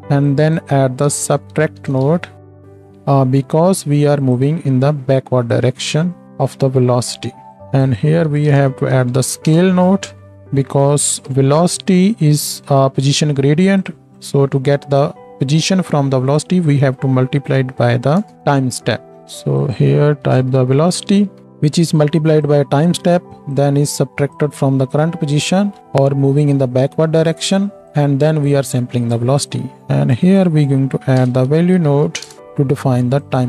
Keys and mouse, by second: 4.4-5.5 drag, 7.5 click, 10.3-19.2 drag, 10.8 g, 14.2-33.4 middle drag, 14.2-19.2 right drag, 19.7-22.6 drag, 23.5-29.4 drag, 30.1-33.4 drag.